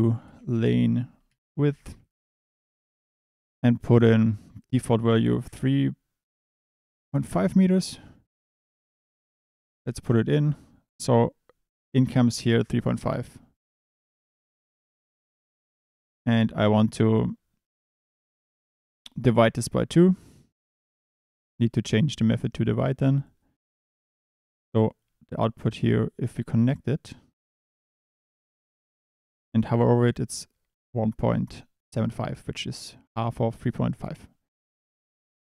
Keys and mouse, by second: 4.6-7.3 drag, 8.4 drag, 8.9-10.0 drag, 16.3-19.6 drag, 20.6-21.4 drag, 21.5 click, 22.2-23.2 drag.